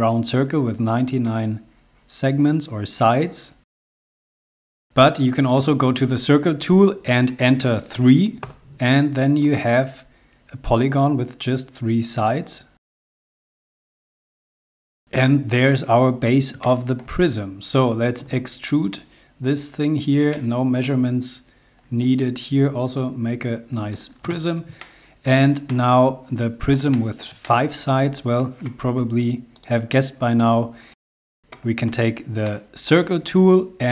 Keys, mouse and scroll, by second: 3.8 p, 4.0 scroll down 1, 4.2 scroll up 1, 4.2 z, 4.5 space, 5.8 c, 8.1 3, 8.6 Return, 9.6 click, 14.1 click, 14.7 middle click, 16.3 scroll down 1, 16.8 shift+middle click, 17.5 scroll up 1, 18.4 p, 19.0 click, 20.5 middle click, 22.0 scroll down 1, 24.1 click, 24.4 space, 25.0 shift+middle click, 27.1 shift+middle click, 29.7 click, 31.2 space, 32.0 c, 32.6 middle click.